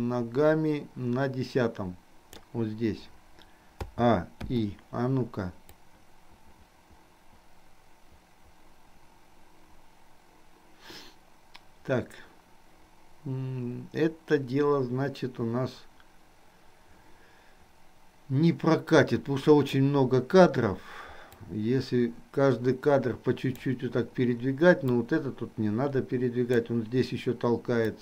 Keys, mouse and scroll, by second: 3.9 a, 4.6 i, 5.9-19.9 drag, 21.3-23.9 drag, 24.9-26.9 drag.